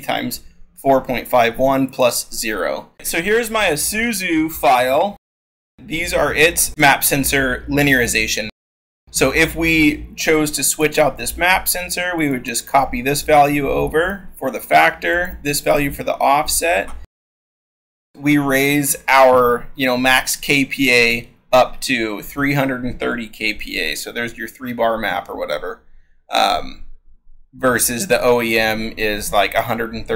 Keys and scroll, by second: 3.4 scroll, 4.1 scroll, 13.4 ctrl+v, 14.5 ctrl+c.